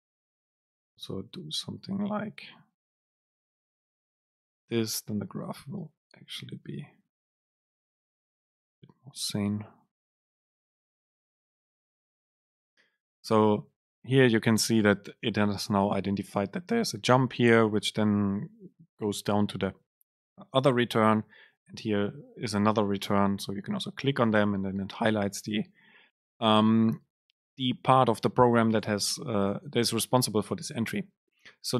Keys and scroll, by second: 0.7 BackSpace, 2.5 Right, 4.3 Up.